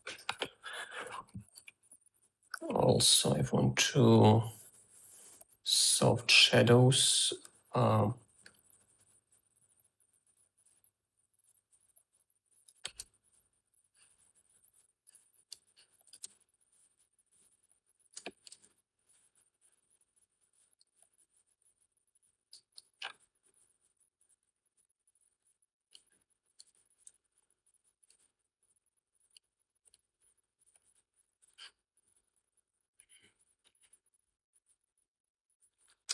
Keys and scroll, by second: 13.3 space, 15.1 3, 16.1 space, 18.1 3.